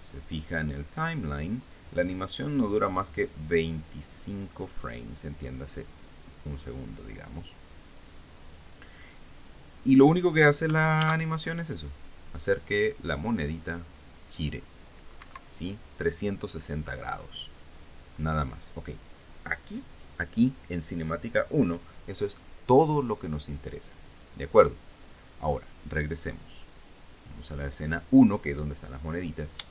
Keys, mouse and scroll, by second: 1.5 click, 11.6 alt+a, 15.8 Escape, 26.8 click, 28.1 click.